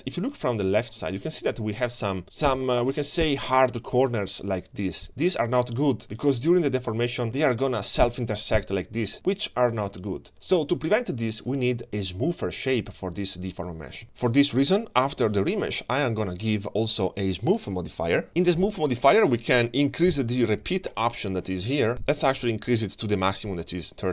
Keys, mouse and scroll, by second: 0.5 scroll down 2, 0.9 shift+middle click, 1.4-2.1 scroll up 7, 2.1-2.5 scroll down 2, 2.2 ctrl+space, 6.0 scroll up 1, 6.7-7.3 scroll up 1, 7.3 middle click, 11.2-14.0 middle drag, 16.8-18.2 drag, 20.5 click, 21.9 click, 23.1 click, 23.6 click.